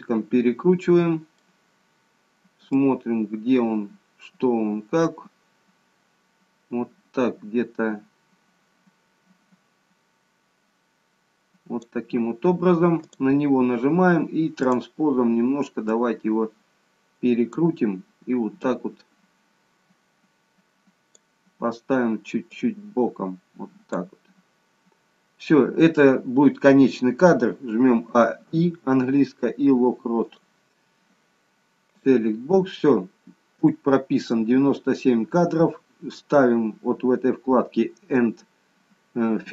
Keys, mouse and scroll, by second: 2.7 click, 13.0 click, 14.7 click, 15.9 click, 19.1 click, 22.6 click, 28.1 a, 28.7 i, 32.0 click.